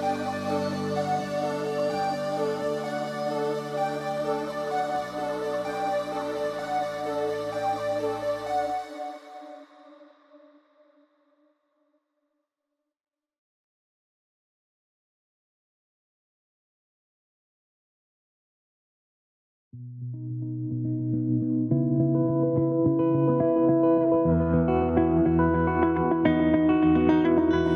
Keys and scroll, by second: 4.9 ctrl+t.